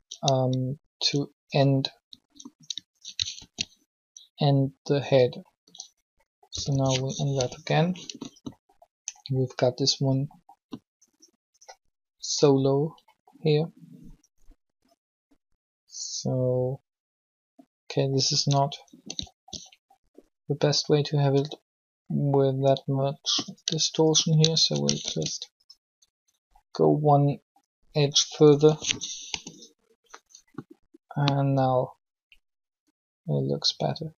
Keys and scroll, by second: 3.3 ctrl+shift+e, 6.5-7.1 typing, 24.9 ctrl+shift+e, 28.3-29.1 typing.